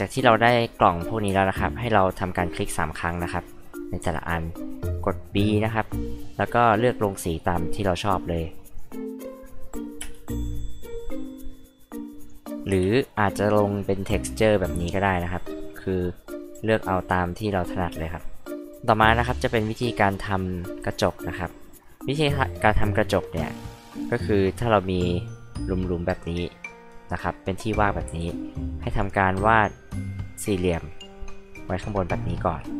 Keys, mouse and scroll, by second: 1.2 space, 2.9 click, 3.1 click, 3.2 click, 4.3 click, 6.3 click, 7.1 click, 8.7 click, 10.0 space, 10.2 click, 11.5 click, 12.2 click, 12.7 h, 12.9 click, 28.8 click, 31.4 click.